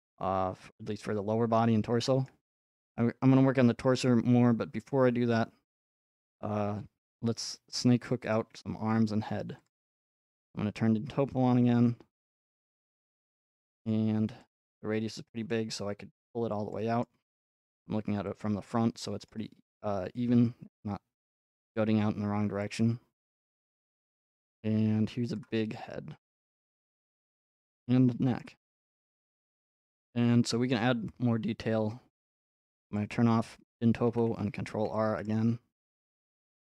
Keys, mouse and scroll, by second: 0.8 click, 2.2 shift+middle click, 2.6-4.2 scroll up 3, 4.3 scroll up 1, 4.7 scroll, 8.3 click, 9.7 click, 10.6-11.8 drag, 10.6 scroll, 11.8 scroll, 14.4 click, 15.2 middle click, 15.7 shift+middle click, 16.7 click, 17.0 middle click, 17.4 middle click, 18.4 click, 19.3 shift+middle click, 21.3 click, 23.3 click, 25.4 click, 25.6-27.8 alt+middle drag, 28.4-30.5 middle drag, 30.5 scroll up 1, 33.0 click, 35.3 middle click, 35.3 scroll up 5, 36.2 scroll.